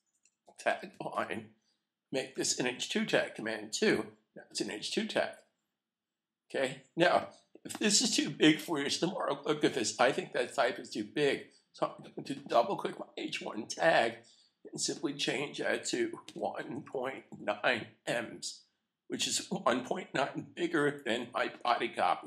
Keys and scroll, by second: 1.1 typing, 3.1 typing, 3.7 super+2, 19.1 9.